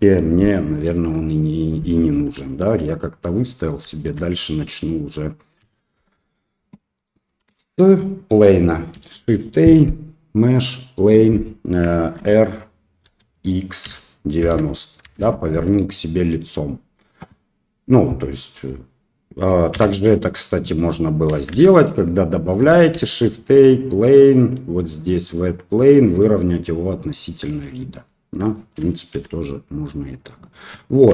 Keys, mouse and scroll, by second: 0.9 KP_1, 2.5 shift+middle click, 3.9 shift+middle click, 5.6 x, 6.9 click, 8.9 shift+a, 12.0 shift+click, 13.0 r, 19.7 ctrl+z, 21.5 ctrl+z, 22.9 shift+a, 24.8 click, 25.7-27.0 drag, 29.1 s, 30.9 shift+middle click.